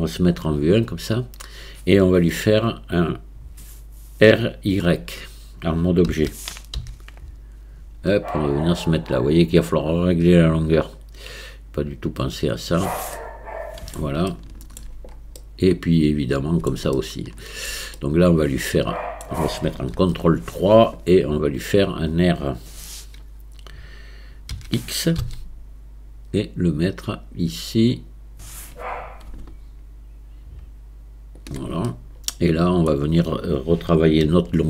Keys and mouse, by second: 0.2 KP_1, 6.1 r, 13.2-14.8 middle drag, 15.4-16.7 middle drag, 17.0-17.7 shift+middle drag, 18.0-19.2 middle drag, 19.9 ctrl+KP_3, 24.5 r, 31.9-32.9 middle drag, 34.2 KP_1.